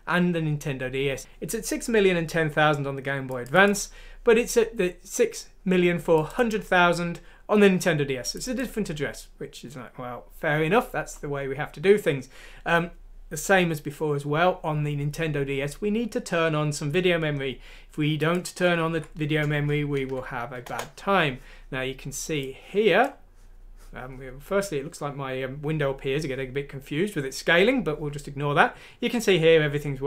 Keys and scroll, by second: 18.9 F6, 20.0 Down, 20.6 Return.